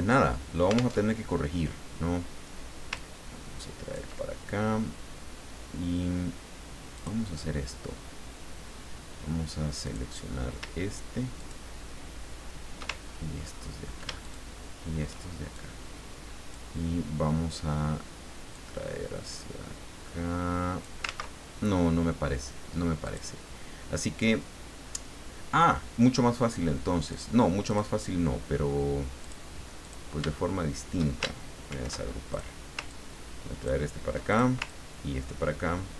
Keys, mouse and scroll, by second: 0.9 alt+Tab, 3.0-4.3 ctrl+drag, 6.9 click, 9.8 click, 11.4 shift+click, 13.0-13.7 ctrl+shift+scroll up 3, 14.2 ctrl+shift+click, 15.5-16.7 shift+drag, 18.5-21.0 drag, 23.0 click, 27.1 click, 27.7 click, 29.2 click, 29.8 click, 31.7 ctrl+shift+g, 32.3 ctrl+shift+click, 32.9-33.9 ctrl+drag, 34.3 ctrl+click, 34.6-35.9 ctrl+drag.